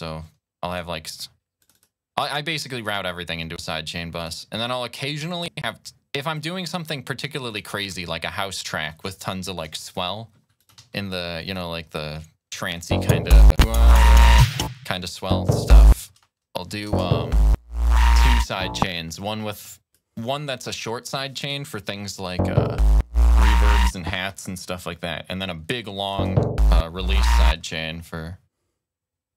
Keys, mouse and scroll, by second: 0.0 click, 1.4 click, 2.5 click, 3.4 click, 4.0 click, 5.1 click, 6.2 click, 7.3 click, 8.7-9.8 drag, 10.4 ctrl+click, 10.6 ctrl+s, 11.3 click, 12.7 space, 14.6-16.7 typing, 14.8 click, 16.4 click, 18.7 space, 19.5 click, 20.0 click, 20.9 click, 21.7 click, 22.1 space, 22.4 click, 23.2-24.0 typing, 23.6 click, 24.7-25.9 drag, 25.9 space, 27.4 space, 29.2 click.